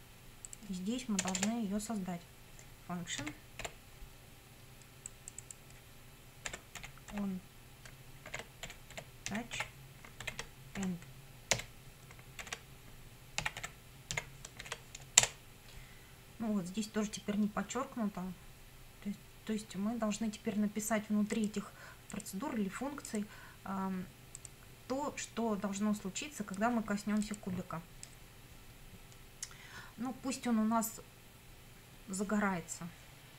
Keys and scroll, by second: 1.2 Return, 3.2 f, 3.6 u, 6.5-14.6 typing, 15.2 Return.